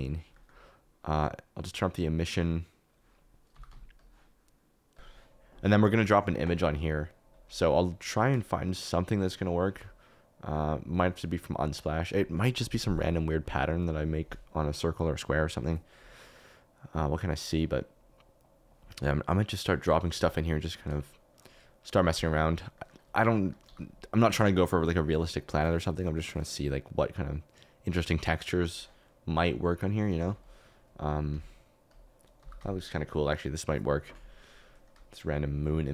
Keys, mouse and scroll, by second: 3.5 g, 3.7 z, 7.5 KP_Decimal, 21.0 click, 22.1 g, 22.7 click, 23.4 click, 23.6 g, 27.3-28.6 drag, 29.5 middle click, 29.9 middle click, 30.2 s, 31.3 s, 32.4 g, 32.5 z, 34.8 click.